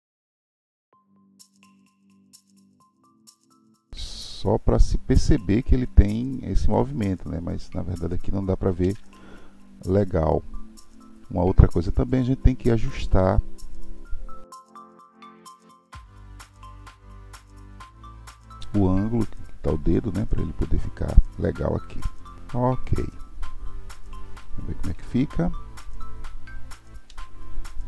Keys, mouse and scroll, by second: 1.0 click, 1.8-2.8 middle drag, 8.8 alt+z, 11.5-14.5 scroll up 1, 14.6 r, 15.9 click, 22.4-22.8 scroll down 5, 22.8-25.9 middle drag, 27.1 alt+z.